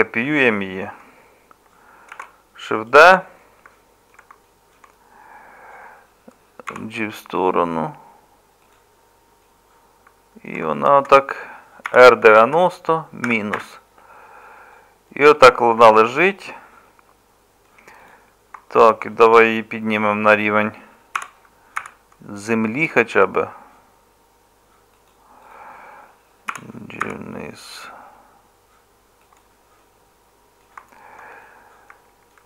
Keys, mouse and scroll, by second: 2.1 shift+d, 6.7 g, 11.9 r, 21.2 g, 26.5 g.